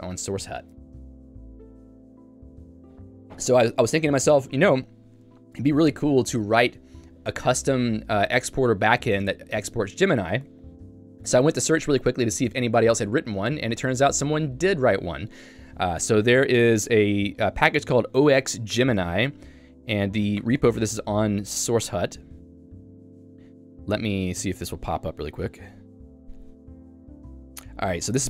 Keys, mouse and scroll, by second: 16.4 j, 16.7-18.6 l, 20.4 ctrl+o.